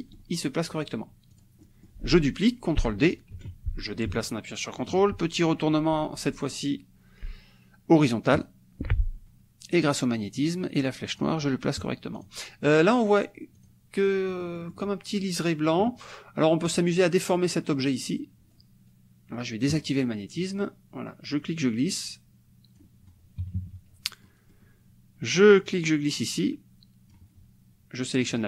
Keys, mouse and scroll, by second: 1.3 click, 3.4 ctrl+d, 3.9-5.0 ctrl+drag, 8.4 click, 9.9-11.4 drag, 12.2 click, 13.7 click, 14.3 click, 15.1-16.7 middle drag, 16.7 click, 19.8 click, 21.3-23.0 drag, 23.4 KP_Subtract, 24.3 click, 24.7 middle click, 25.7-27.3 drag, 28.3 click.